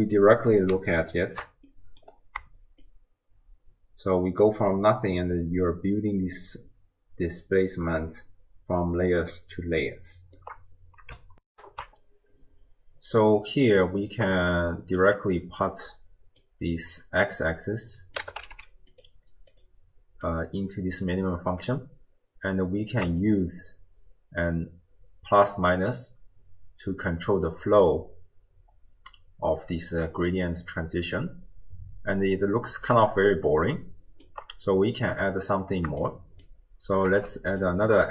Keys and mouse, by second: 0.1 middle click, 1.7 middle click, 2.8-10.4 shift+drag, 11.5 ctrl+alt+shift+w, 11.6 ctrl+alt+shift+q, 14.6 click, 14.8 right click, 16.4-19.7 drag, 18.5 d, 20.3-21.1 drag, 23.2-34.3 shift+drag, 35.0 middle click, 36.1 click, 37.1 shift+d.